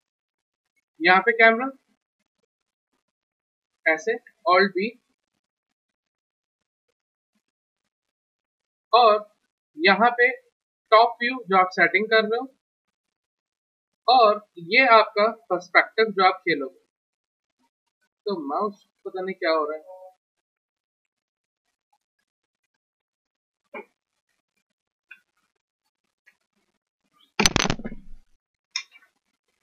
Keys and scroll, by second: 1.1-2.1 typing, 2.6 F3, 4.5 alt+b, 10.3-12.6 typing, 15.6 p.